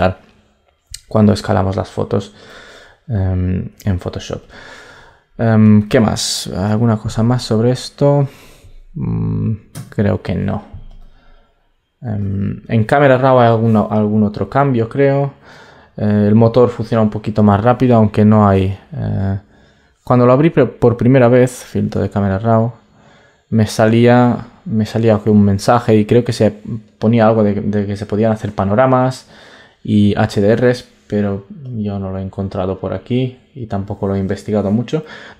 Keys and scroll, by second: 6.4 super+t.